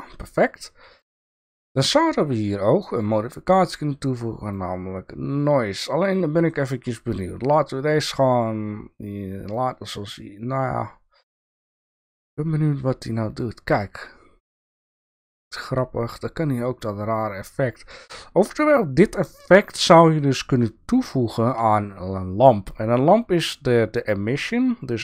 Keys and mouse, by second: 3.1-4.6 drag, 7.6-9.6 drag, 9.9-11.5 drag, 12.4-13.9 drag, 18.1-21.5 drag.